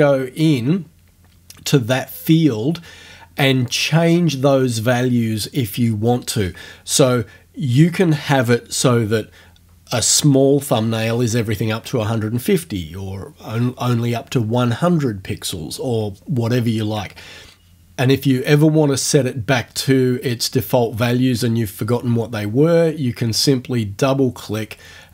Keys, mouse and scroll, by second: 3.7 click.